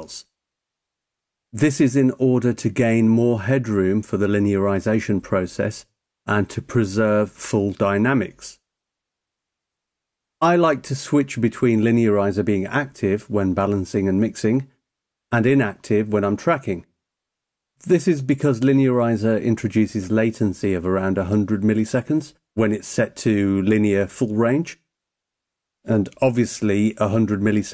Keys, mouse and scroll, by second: 2.9 click, 25.8 click.